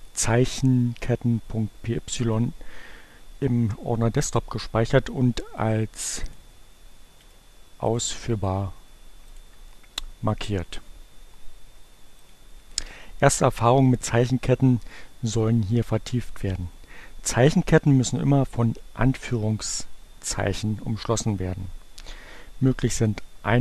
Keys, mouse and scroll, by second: 5.3 right click, 6.3 click, 7.0 right click, 7.8 click, 9.2 click, 11.5 click.